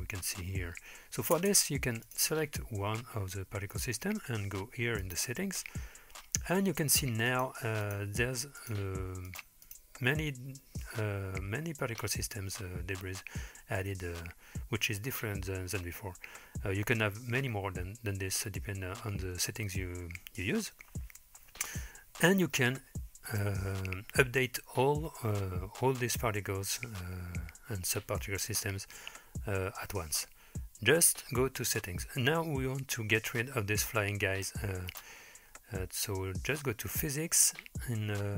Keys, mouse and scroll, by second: 1.4 space, 2.1 click, 5.0 click, 7.3 click, 7.9 drag, 8.6 click, 9.3 click, 9.7 click, 22.5-24.9 scroll down 3, 31.1-32.1 scroll down 1, 32.1-34.2 scroll down 1, 34.9 click, 35.5-38.0 scroll down 3.